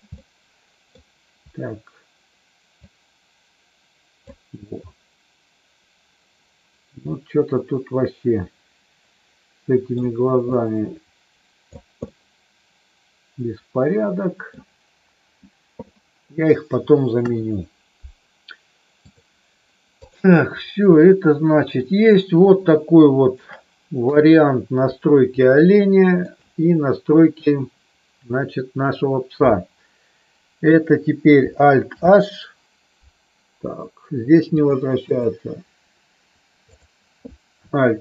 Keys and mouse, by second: 0.1 middle click, 2.7-4.2 drag, 4.6-10.0 middle drag, 10.5-11.6 drag, 12.1-14.5 middle drag, 15.9 middle click, 17.1 KP_1, 19.0 click, 20.0 click, 21.0 middle click, 22.5 shift+middle click, 24.0 KP_3, 25.4 middle click, 31.9 alt+h, 34.6 click, 36.6 click.